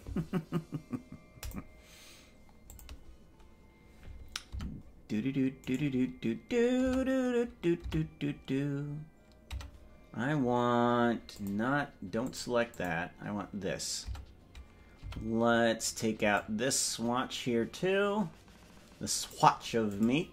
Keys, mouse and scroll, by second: 5.7 right click, 7.1 Tab, 7.9 Tab, 9.7 Tab, 11.4 click, 12.3 click, 12.7 click, 14.1 Tab, 15.1 c.